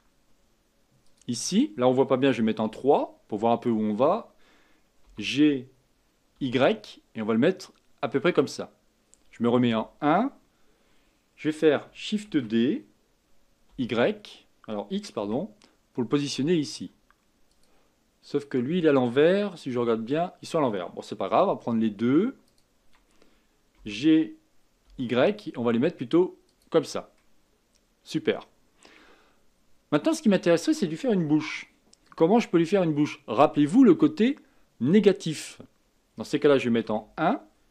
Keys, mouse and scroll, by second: 2.6 KP_3, 5.0 g, 9.6 KP_1, 12.3 shift+d, 19.7 KP_7, 22.5 shift+click, 23.8 g, 27.1-30.2 middle drag, 36.8 KP_1.